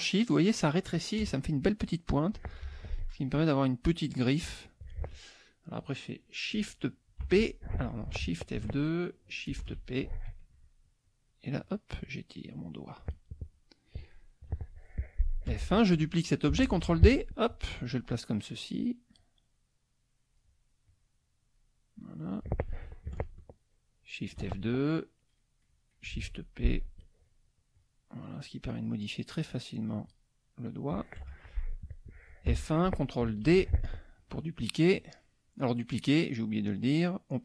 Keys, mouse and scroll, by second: 1.2 KP_Add, 1.9 click, 3.0 F1, 3.0-4.1 drag, 8.5 ctrl+shift+F2, 9.6 shift+p, 11.0 click, 11.6 click, 12.0 click, 12.5 click, 15.5 F1, 16.7 ctrl+d, 17.0 ctrl+click, 17.9 click, 18.5-19.0 drag, 19.2-20.6 drag, 20.9-21.7 drag, 21.9-22.6 drag, 25.0 F2, 26.2 shift+p, 26.9 click, 27.3 click, 27.7 click, 28.3 click, 28.8 click, 29.3 click, 30.0 click, 30.7 click, 31.2 F1, 32.5 F1, 33.5 ctrl+d, 34.2 click.